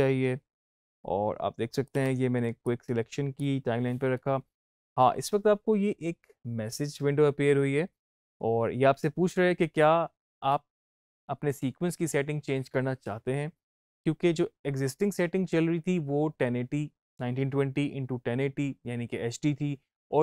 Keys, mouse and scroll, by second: 1.8 o, 2.5-5.7 drag.